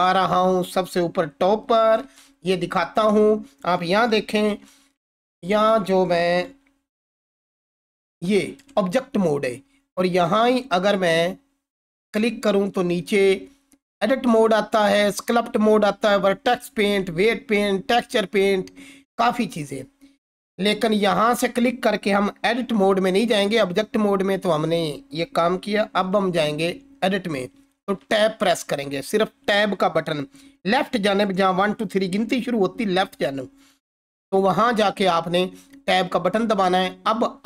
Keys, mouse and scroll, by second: 1.7 click, 2.0 ctrl+4, 7.6 ctrl+1, 7.7-8.7 ctrl+drag, 10.6 Escape, 26.1 ctrl+4, 28.0 Tab.